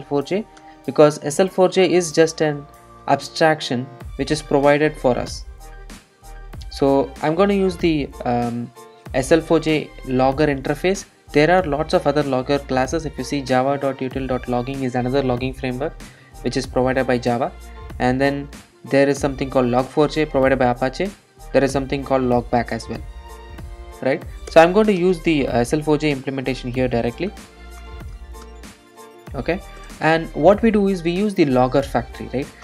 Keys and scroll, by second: 24.5 Return, 24.6 Return.